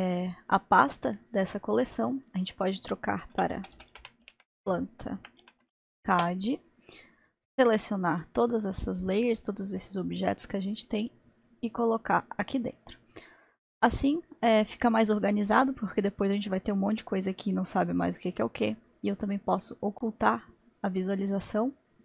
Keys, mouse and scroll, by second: 2.1-6.0 drag, 7.3-8.5 drag, 11.5-14.6 drag, 19.2 click.